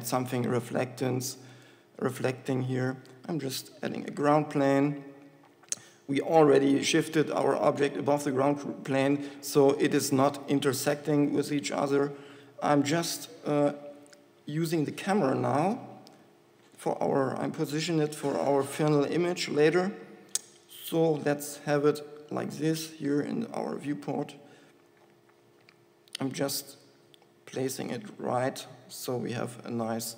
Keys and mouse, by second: 3.1 s, 4.9 KP_1, 14.4 KP_0, 16.1 KP_0, 17.4 shift+f, 24.1 shift+f, 24.2 shift+f.